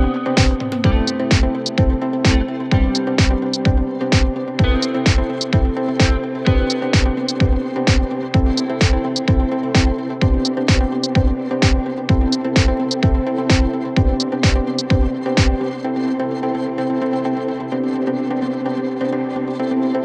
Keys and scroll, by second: 0.8 Escape, 6.9 ctrl+z, 8.1 shift+F2, 8.2 F3, 14.1 F3, 15.5 ctrl+r, 17.0 ctrl+g.